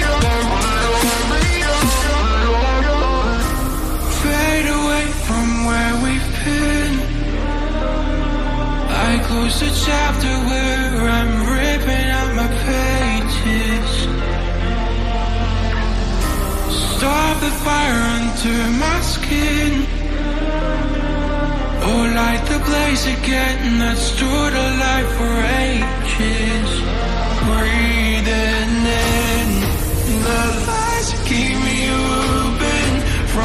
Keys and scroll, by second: 20.6 ctrl+j, 20.9 shift+Down, 21.7 shift+Down.